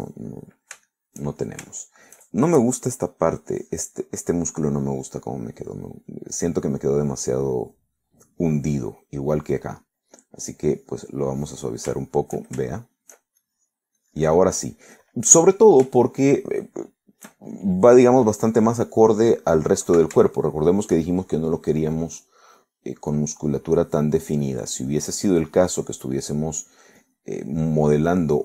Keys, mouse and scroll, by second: 0.3-1.4 drag, 1.4 middle click, 1.9-2.5 shift+scroll up 1, 2.5 shift+middle click, 4.6-5.9 drag, 6.0-7.3 drag, 8.3 click, 8.8 middle click, 9.3-10.5 drag, 11.0 click, 12.3 click, 13.1 shift+middle click, 13.8 shift+middle click, 14.5 shift+click, 15.1 click, 15.2 middle click, 15.7 middle click, 16.9 shift+middle click, 17.1 shift+middle click, 17.6 shift+middle click, 18.8 shift+middle click, 21.3 shift+middle click, 22.1-23.3 shift+middle drag, 24.2 click, 25.0-27.3 drag, 27.6 click, 28.1 click.